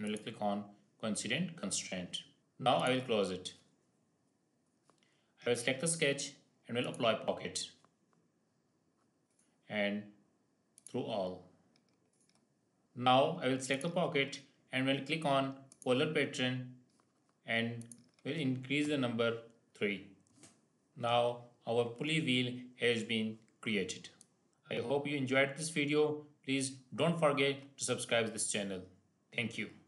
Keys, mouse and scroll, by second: 1.5 scroll down 1, 2.7 click, 6.7 click, 9.2 click, 13.6 click, 13.7 click, 16.3 click, 20.9 scroll down 1, 21.0-21.5 scroll up 1, 21.5-23.1 scroll down 1, 23.1 scroll down 1, 24.1 click, 24.1 click.